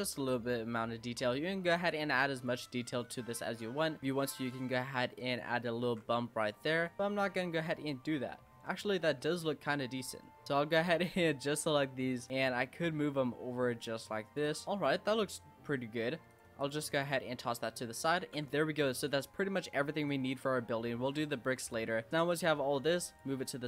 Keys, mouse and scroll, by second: 0.0 scroll down 4, 0.2-1.4 middle drag, 1.4 scroll up 2, 1.7 Tab, 2.0 click, 2.3 click, 2.9-4.0 middle drag, 4.0 s, 4.6 e, 5.9 ctrl+b, 6.6 Tab, 6.7 scroll down 3, 6.9-8.1 middle drag, 8.1-8.5 scroll up 1, 8.5 Tab, 9.0 middle click, 9.3 scroll up 3, 10.9 shift+click, 11.6 click, 12.3 ctrl+z, 12.7 click, 14.4 Tab, 14.6 middle drag, 14.9-15.4 scroll up 3, 15.4-16.0 middle drag, 16.0 scroll down 5, 16.3 click, 16.6 click, 17.4 click, 18.3 ctrl+z, 18.4 middle click, 19.0 click, 20.2-20.8 scroll down 5, 20.8-21.3 shift+middle drag, 21.3 click, 22.0 middle drag, 22.3 click, 23.0 click.